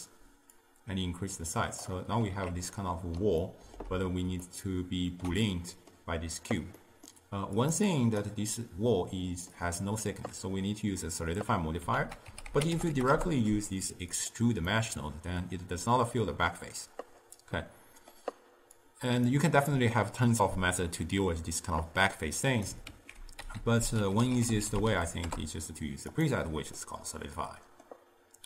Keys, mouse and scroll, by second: 2.3 alt+z, 2.8-7.7 middle drag, 7.7 click, 8.0-8.7 drag, 8.7-11.7 middle drag, 12.0 ctrl+a, 14.8-18.9 middle drag, 18.9-22.0 drag, 22.6 click, 23.0 ctrl+x, 23.5 ctrl+a, 26.9-28.4 middle drag.